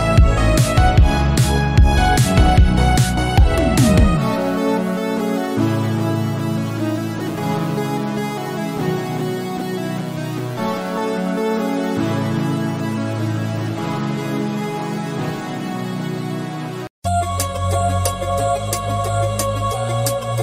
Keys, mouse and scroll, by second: 0.4 click, 0.8 scroll up 5, 1.7 click, 2.1-3.4 right drag, 3.4 scroll down 1, 3.6 shift+middle click, 3.9 scroll up 5, 4.5 click, 4.9 scroll down 6, 5.2 shift+middle click, 5.5-5.9 scroll up 1, 5.9 Tab, 6.7 alt+z, 7.2 alt+z, 9.0 alt+z, 9.3-10.9 drag, 12.0 scroll up 1, 12.7-13.7 drag, 13.7 s, 16.4 shift+middle click, 17.1 click, 18.0 s, 19.9 click.